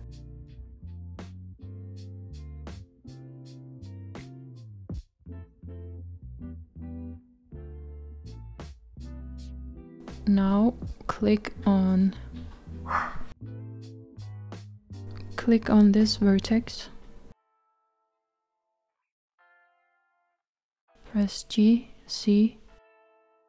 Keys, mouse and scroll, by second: 0.1-1.9 middle drag, 1.9 KP_1, 3.7-5.7 scroll up 2, 5.7 Tab, 9.4-11.4 middle drag, 11.4-12.1 scroll up 1, 15.3 click, 20.6-21.4 scroll down 1, 21.4-23.4 middle drag.